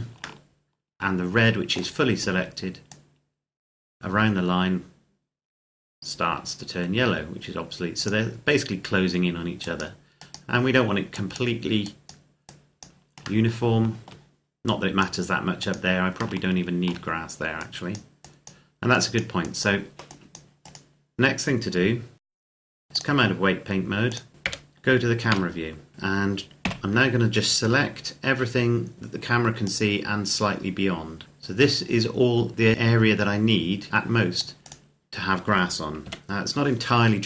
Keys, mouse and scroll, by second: 0.2 shift+middle click, 2.7 click, 13.2 shift+middle click, 14.4 click, 16.2 shift+middle click, 17.4 click, 20.4 right click, 22.2 click, 22.8 click, 24.3 KP_0, 25.1 a, 25.9-26.5 scroll down 1, 26.5 c, 26.9-27.6 scroll down 1, 27.6 scroll up 1, 27.7-29.2 scroll down 1, 29.5 click, 34.5 right click, 35.9 KP_7.